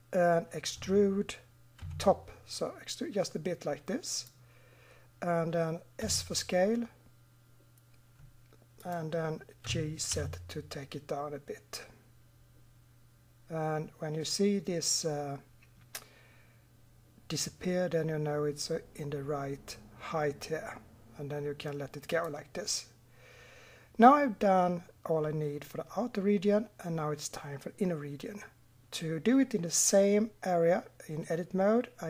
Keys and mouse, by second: 0.8 e, 6.0 s, 9.7 g.